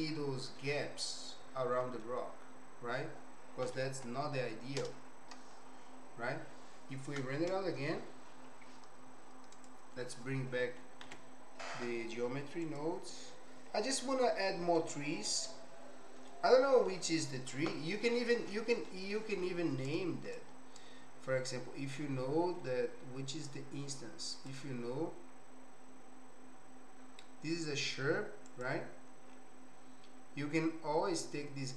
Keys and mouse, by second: 0.6-2.0 middle drag, 3.8 ctrl+., 4.8 KP_0, 9.5 click, 11.3 alt+h, 12.7 click, 14.0 middle click, 15.3-16.4 middle drag, 18.9 middle click, 20.0 click, 20.8 click.